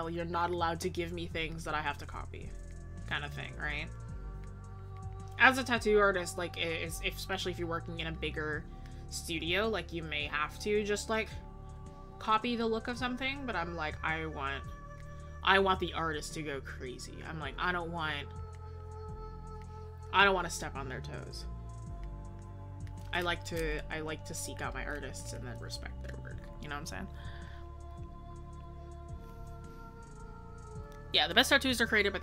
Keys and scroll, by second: 3.6 ctrl+z, 6.6 ctrl+z, 20.5 ctrl+z.